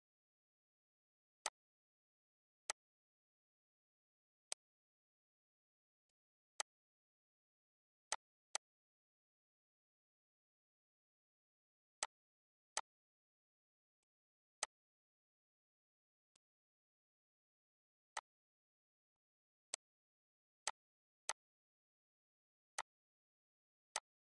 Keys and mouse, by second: 0.5 click, 1.0 click, 2.3 click, 3.9 click, 4.4 click, 5.5 click, 6.1 click, 6.5 click, 8.0 click, 8.4 click, 9.5 click, 10.7 click, 11.2 click, 12.0 click, 12.7 click, 13.5 click, 14.0 click, 14.5 click, 16.3 click, 18.1 click, 19.1 click, 19.7 click, 20.6 click, 21.2 click, 22.2 click, 22.8 click, 23.9 click.